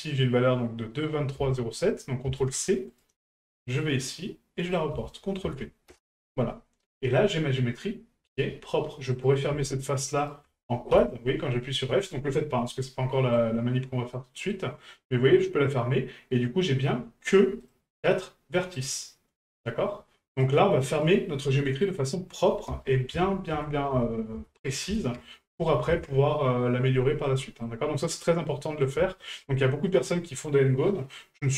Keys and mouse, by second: 1.1-3.0 drag, 3.6 right click, 4.7-6.0 ctrl+drag, 6.9 middle click, 9.1 right click, 10.2 shift+right click, 11.5-13.3 middle drag, 14.1 middle click, 17.6 click, 18.7 right click, 19.5 right click, 20.3 right click, 20.9 right click, 27.2-27.6 middle drag, 28.4-28.8 middle drag, 29.2 shift+middle drag, 29.5-29.9 middle drag.